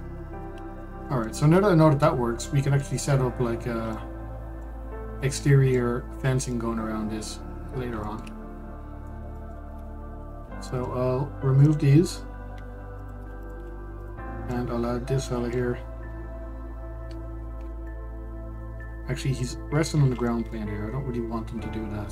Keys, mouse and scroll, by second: 1.3-1.7 scroll down 2, 1.7-2.2 middle drag, 2.2-2.7 scroll up 1, 2.7-8.4 middle drag, 8.4-8.7 scroll down 1, 8.7-10.4 shift+middle drag, 10.4 Delete, 11.1 scroll down 1, 11.4-11.7 middle drag, 11.7-12.3 scroll up 1, 12.3 click, 13.2 Delete, 13.6 click, 14.1 click, 14.7 click, 15.2-18.2 middle drag, 18.5-20.6 middle drag, 20.6-20.9 scroll up 2, 20.9-22.1 middle drag.